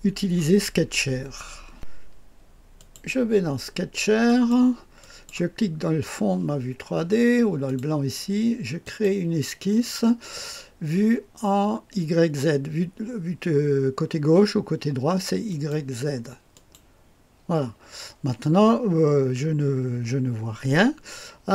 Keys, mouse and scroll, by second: 0.5-1.7 scroll down 2, 2.7 click, 4.2 click, 5.0 click, 7.6-9.8 drag, 15.4 click, 16.5 click.